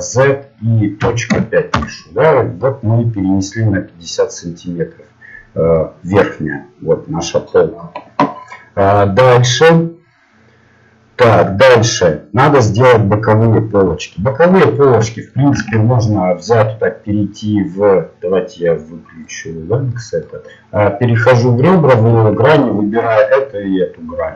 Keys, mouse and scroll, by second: 2.6-5.4 middle drag, 14.0-16.8 middle drag, 16.6 ctrl+Tab, 19.2-21.5 drag, 21.5-23.2 right drag, 23.2-24.3 middle drag.